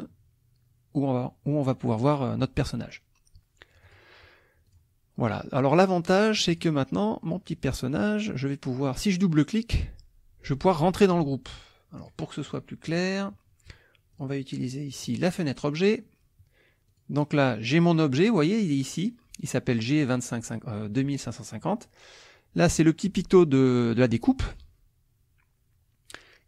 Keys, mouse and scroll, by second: 3.8 click, 4.7 click, 6.1 click, 6.5 click, 7.2 click, 8.0 click, 12.0 click, 12.5 click, 12.9 click, 14.2 click, 15.0 click, 16.9 click.